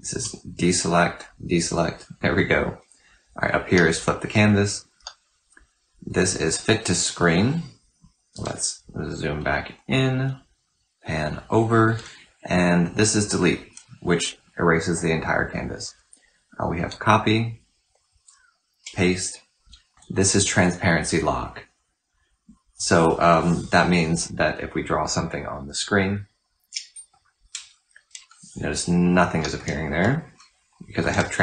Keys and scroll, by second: 0.0 ctrl+d, 3.5 typing, 4.8-5.3 typing, 8.3 typing, 18.6 typing, 19.6-20.4 typing, 26.7 typing, 29.2 typing.